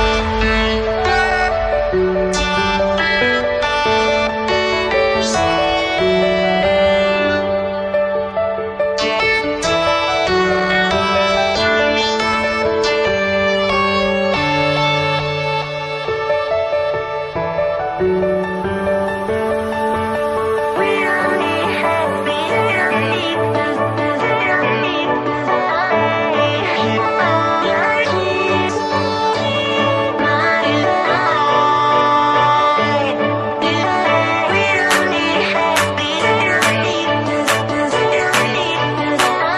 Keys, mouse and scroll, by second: 2.1-2.4 alt+scroll up 1, 4.1 click, 4.8-5.2 alt+scroll up 1, 5.5 scroll up 1, 7.4 click, 8.2 scroll down 1, 8.7 click, 11.1 scroll down 1, 12.7-13.8 scroll up 2, 13.8 click, 19.2-21.1 typing, 22.5 Return, 23.6 click, 24.6-36.8 scroll down 1, 36.8 click, 38.0-39.5 typing.